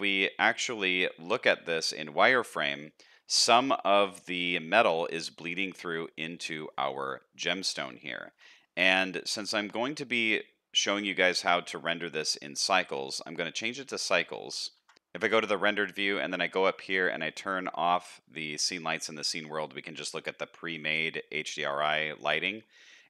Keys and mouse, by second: 2.5-2.9 middle drag, 3.3 alt+a, 3.7 shift+middle drag, 4.1-5.5 middle drag, 5.7 shift+middle drag, 7.6 middle click, 8.0 z, 11.4 shift+middle click, 11.9 middle click, 12.9 middle click, 14.7 ctrl+s, 18.2 click, 18.5-18.9 shift+middle drag, 19.4 middle click, 21.4 middle click, 22.0 shift+middle click, 22.9 middle click.